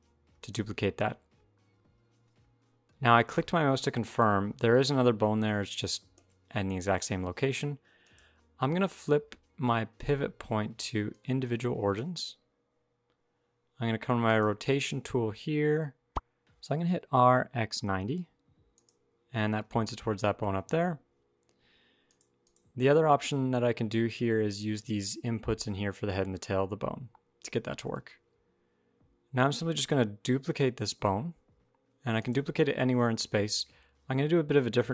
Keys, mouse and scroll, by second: 2.8-4.0 scroll down 2, 4.0 g, 6.7 scroll down 2, 7.3-7.8 shift+scroll up 1, 7.8 click, 14.0 click, 16.3 click, 16.4-16.8 scroll down 1, 16.8 r, 19.3-19.9 scroll down 2, 20.3 shift+middle click, 20.5-21.8 shift+scroll down 1, 21.8 click, 22.2 click, 27.6 shift+middle click, 30.1 shift+d.